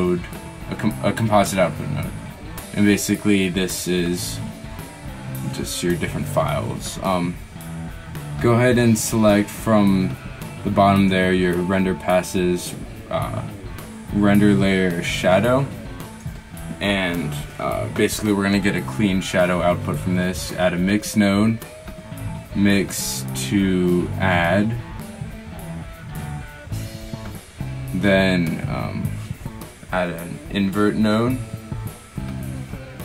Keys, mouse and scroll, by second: 32.7 shift+s, 32.7 shift+a.